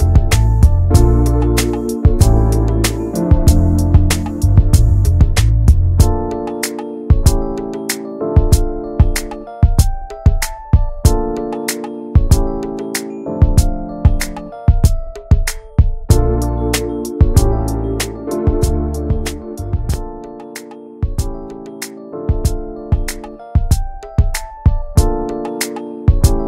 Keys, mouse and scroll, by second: 3.1 Tab, 3.2 click, 3.4 scroll down 4, 3.6 middle click, 4.6 ctrl+s, 4.9 scroll down 1, 5.2-7.0 middle drag, 7.9 ctrl+s, 8.2 click, 8.5 Tab, 8.9 shift+middle click, 9.2 alt+z, 9.4-10.0 scroll up 5, 9.6 shift+middle click, 10.3 1, 10.5 scroll up 1, 10.8 click, 11.5 scroll down 3, 11.7 shift+middle click, 12.3-12.7 shift+scroll up 1, 12.7 shift+click, 13.5 shift+middle click, 14.1 click, 16.8 shift+click, 17.0 scroll down 2, 17.2 shift+middle click, 17.3-17.9 shift+scroll up 1, 17.9 shift+click, 18.2 shift+middle click, 18.6 s, 20.6 shift+middle click, 21.1 click, 22.3 alt+z, 22.8 Tab, 23.1 alt+z, 23.5 click, 24.1 shift+click, 24.6 scroll up 1, 25.0 click, 26.3 alt+z.